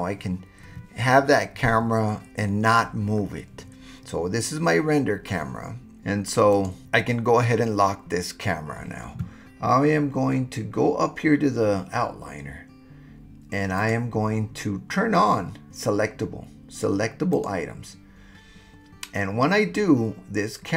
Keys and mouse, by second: 6.5 click, 13.8-18.9 drag.